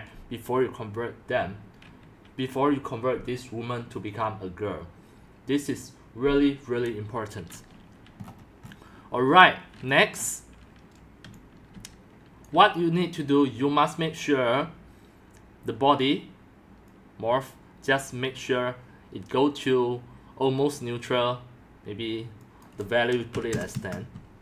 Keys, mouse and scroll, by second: 0.0-24.4 typing, 8.2-10.1 scroll up 12, 10.1-11.1 scroll up 6, 11.1-12.3 scroll up 1, 12.3 middle click, 12.6-15.2 drag, 16.8-17.8 drag, 20.7-24.4 drag.